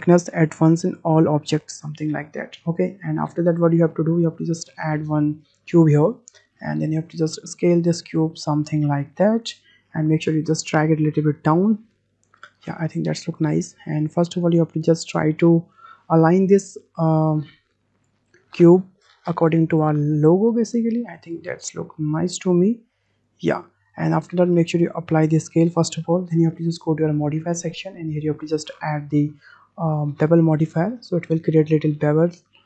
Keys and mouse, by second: 0.9 middle click, 1.7 middle drag, 1.9-2.4 drag, 2.9 `, 6.7-7.1 shift+middle drag, 7.7 click, 8.8-9.8 drag, 9.9 w, 10.1 middle drag, 10.8-11.9 drag, 12.0-12.7 middle drag, 13.1 middle click, 14.6 shift+click, 15.7 click, 16.6 click, 17.7 click, 18.5 click, 20.2-21.2 drag, 21.9-23.0 drag, 23.7-24.1 middle drag, 24.5 ctrl+a, 25.8 click, 27.5 click, 30.9 click.